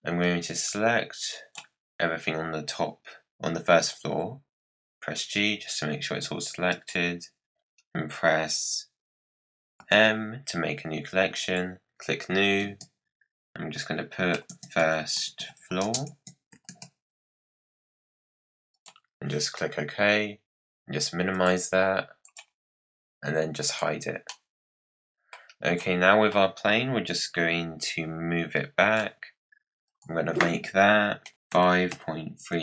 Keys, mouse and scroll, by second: 0.2 click, 4.0 g, 9.7 m, 17.1-18.3 typing, 21.3 click, 22.2 click, 23.6 click, 24.2-25.6 middle drag, 25.6 click, 28.5 click, 29.8-31.3 drag.